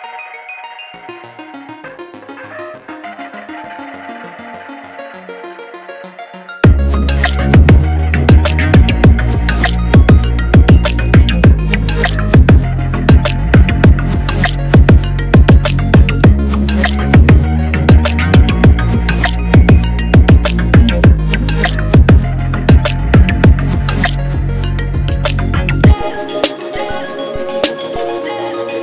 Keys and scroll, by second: 0.0-0.4 typing, 5.0 ctrl+d.